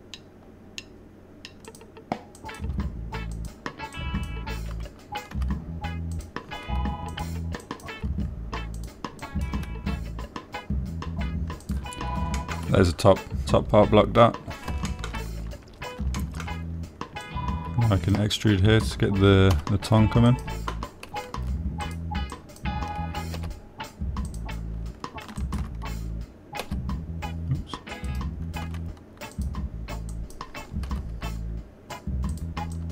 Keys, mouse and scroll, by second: 0.0 click, 0.6 click, 3.0 click, 3.8 click, 4.7 click, 4.7 g, 5.4 click, 7.5 click, 8.5 click, 8.5 g, 9.0 click, 10.1 click, 10.1 g, 10.6 click, 13.0 click, 13.7 shift+click, 13.8 shift+middle click, 16.2 shift+click, 17.5 shift+middle click, 18.6 click, 20.9 e, 21.7 click, 22.4 g, 23.2 click, 23.7 click, 25.6 click, 26.8 shift+click, 28.0 g, 29.4 click, 30.0 e, 30.7 click, 31.6 click, 32.2 g.